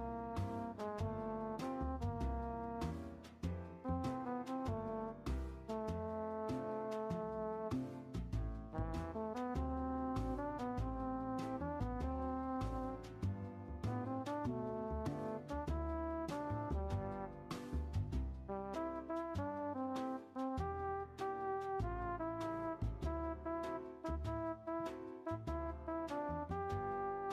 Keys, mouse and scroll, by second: 3.9-7.8 shift+middle drag, 7.8-22.7 drag, 22.7-23.9 middle drag, 23.9-24.9 scroll up 1, 24.9-27.3 drag.